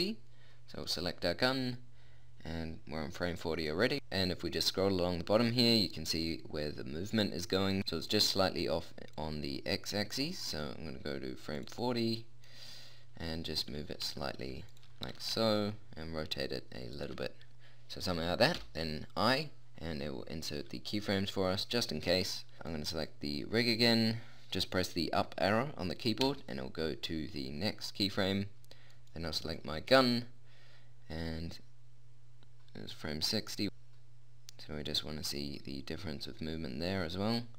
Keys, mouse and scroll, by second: 0.7-2.5 right drag, 3.7 middle click, 9.2 click, 11.1 middle click, 11.6-14.3 drag, 13.3 g, 14.3 middle click, 15.1 r, 18.6 i, 26.3 Up, 28.9-30.7 right drag, 31.7 click.